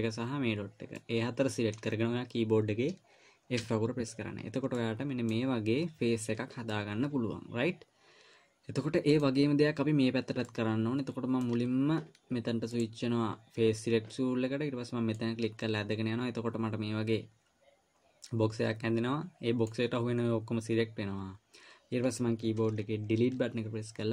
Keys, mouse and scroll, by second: 1.4 middle click, 4.0 f, 5.2 middle click, 7.1 middle click, 10.9 middle click, 13.1 click, 15.5 click, 23.6 Delete.